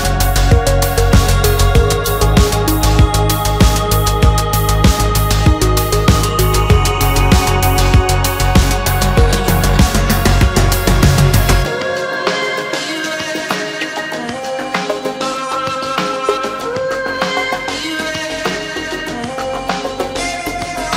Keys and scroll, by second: 0.6 alt+7, 3.3 alt+z, 6.9 Return, 9.1 alt+z, 12.7 Escape.